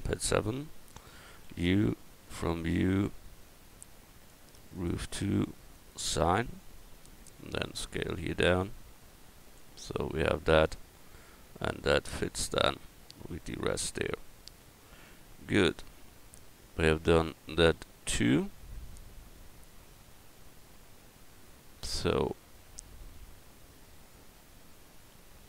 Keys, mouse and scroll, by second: 0.0 KP_7, 1.4 u, 4.6-7.4 drag, 7.4 s, 11.2 Tab, 17.8 a.